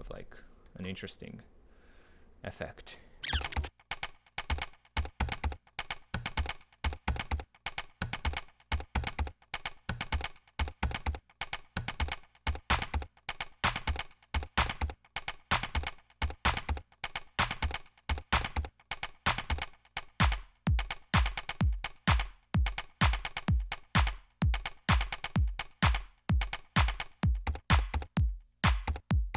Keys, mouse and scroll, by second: 0.8-2.2 drag, 4.4 click, 4.5 right click, 4.7 click, 4.8 Return, 4.9 click, 6.0 click, 6.1 right click, 6.3 scroll up 2, 7.4 click, 7.5 right click, 7.6 double click, 7.7 Return, 7.8 right click, 7.8 click, 8.1 scroll up 2, 8.2 double click, 8.5 click, 8.6 Delete, 9.0 right click, 9.1-10.1 drag, 9.4 Return, 9.7 middle click, 10.2 click, 10.5 right click, 10.8 right click, 11.1 click, 11.1 right click, 11.3 middle click, 11.5 drag, 11.7 Return, 13.2 Return, 14.4 click, 14.6 right click, 15.5 Delete, 16.0 click, 16.2 click, 16.4 click, 16.7 click, 16.7 Delete, 17.0 click, 17.0 Delete, 17.1 right click, 17.3 ctrl+z, 17.3 click, 17.4 right click, 17.5 click, 17.8 right click, 18.2 drag, 18.3 double click, 18.5 Return, 18.5-18.9 drag, 18.9 right click, 19.0 drag, 19.5 click, 19.6 ctrl+v, 19.6 click, 19.8 middle click, 19.9 right click, 20.0-20.4 drag, 20.1 right click, 20.4 Delete, 20.7 click, 21.5 Delete, 21.6 drag, 21.9 middle drag, 22.1 click, 22.3 space, 22.8 right click, 23.0 click, 23.1 middle click, 23.2 click, 23.2 right click, 23.3 click, 23.4 Delete, 23.6 right click, 23.8 click, 23.9 middle click, 24.1 click, 24.1 right click, 24.7 right click, 24.9 click, 26.2 Down, 26.4 Left, 26.5 click, 27.0 alt+right click, 27.3 right click, 28.0 ctrl+z, 28.4 ctrl+z, 29.0 ctrl+z, 29.1 right click, 29.3 click.